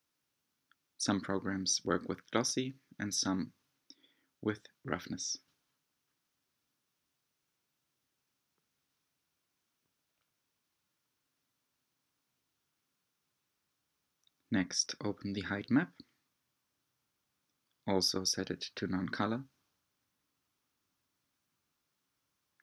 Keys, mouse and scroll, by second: 5.3 click, 7.0 click, 8.9 click, 10.1 g, 16.1-17.6 drag, 19.7-21.4 drag.